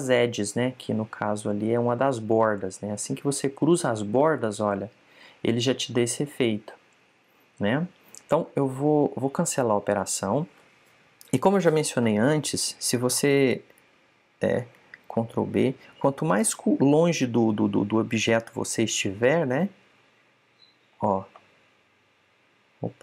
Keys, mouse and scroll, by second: 17.2 ctrl+b.